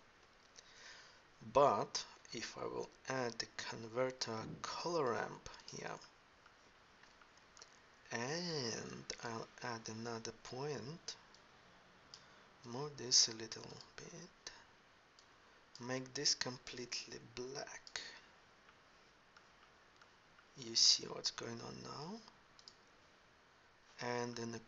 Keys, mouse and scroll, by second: 0.0 ctrl+Up.